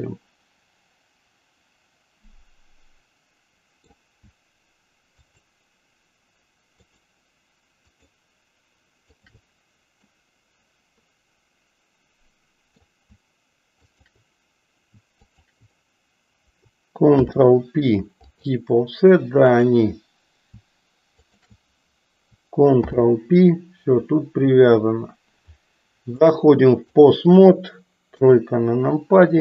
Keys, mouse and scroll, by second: 5.3 shift+click, 6.8 shift+click, 7.9 shift+click, 9.1 shift+click, 10.1-12.9 middle drag, 13.8 shift+click, 17.0 ctrl+p, 19.6 click, 21.2 shift+click, 22.8 ctrl+p, 26.2-27.2 drag, 28.0 KP_3.